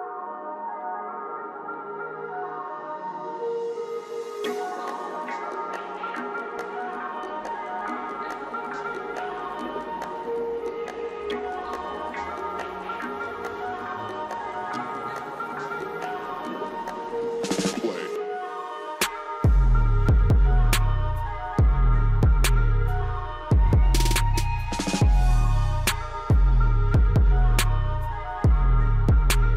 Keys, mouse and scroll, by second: 1.1 right click, 2.5-2.8 scroll down 1, 3.2-4.7 drag, 4.7 right click, 6.3-9.9 drag, 10.4 ctrl+z, 10.7-13.9 drag, 13.9-14.6 scroll up 1, 15.6-17.7 drag, 17.7-18.0 scroll down 1, 18.8-21.2 drag, 21.2-23.6 drag, 23.6 ctrl+right click, 24.7 ctrl+z, 24.9-29.5 drag, 27.3 typing.